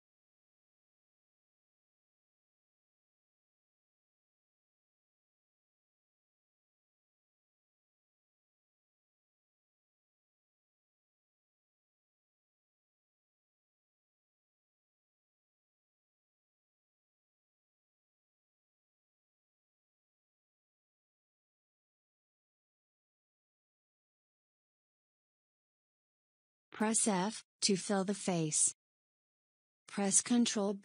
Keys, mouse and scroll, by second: 0.2 s, 2.0 e, 4.7 s, 7.5 e, 10.0 s, 13.2 e, 15.7 e, 18.2 s, 21.8 e, 26.6 f, 27.1-29.4 middle drag, 29.4 KP_1.